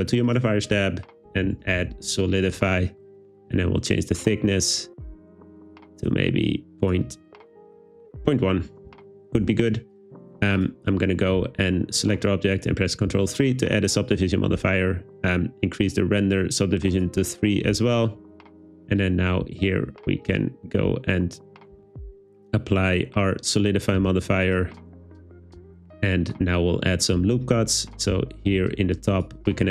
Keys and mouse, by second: 0.3-2.0 drag, 3.5-7.0 shift+drag, 7.8-8.9 drag, 13.2 super+3, 17.0 click, 19.5 Tab, 21.5 click, 21.8 Tab, 24.5-25.2 drag, 25.6 Tab, 28.4 super+r, 29.2 click, 29.5 click.